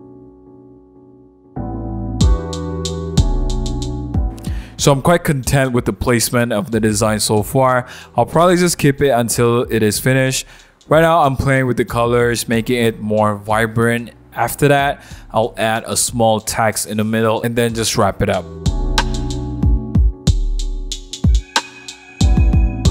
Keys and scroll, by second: 0.3 alt+super+e, 2.8 super+1, 2.9 super+0, 3.0 super+-, 3.3-4.7 typing, 14.8 0, 18.7-22.9 typing.